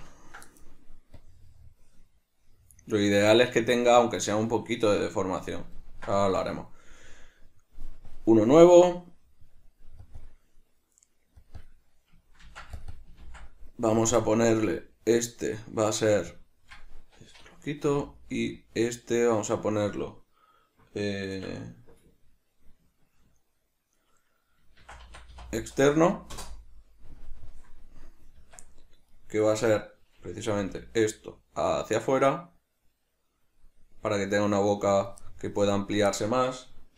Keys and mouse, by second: 0.0 Tab, 0.0-1.3 ctrl+middle drag, 1.3-6.0 drag, 6.0-8.2 ctrl+shift+middle drag, 8.2-11.6 drag, 11.7-13.0 drag, 13.0 click, 13.4 ctrl+v, 14.1 click, 14.3-28.6 drag, 28.5 Tab, 29.2 right click, 29.7 right click, 35.4 middle click.